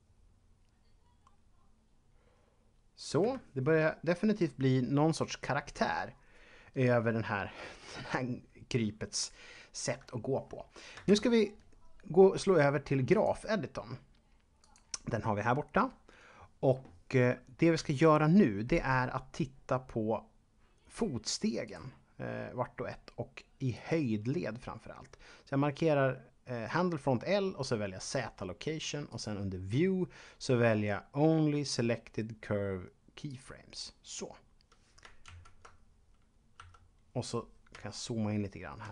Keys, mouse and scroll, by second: 3.2 Escape, 11.1 ctrl+Up, 13.1 click, 14.6 click, 17.8 shift+middle click, 21.6 click, 23.7 click, 29.1 click, 33.3 click, 35.2 ctrl+Up, 36.6 Home, 38.8 middle click.